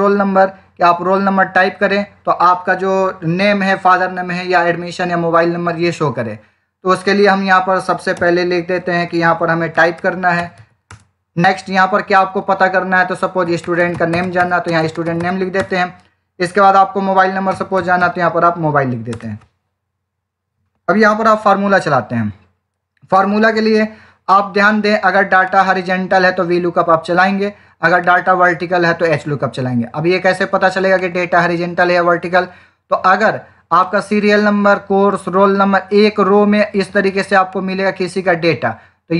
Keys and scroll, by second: 8.0 Return, 9.2 Up, 9.4-11.0 typing, 13.1-15.6 typing, 17.2-18.4 typing.